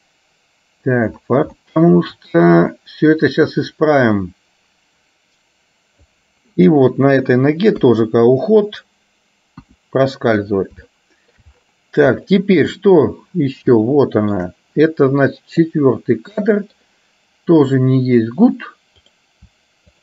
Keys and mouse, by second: 1.6 shift+middle click, 3.3-6.2 drag, 7.8 KP_3, 9.7 KP_1, 11.0 middle click, 12.5 middle click, 13.8 shift+middle click, 15.7-16.8 middle drag, 17.7 click, 19.1 click.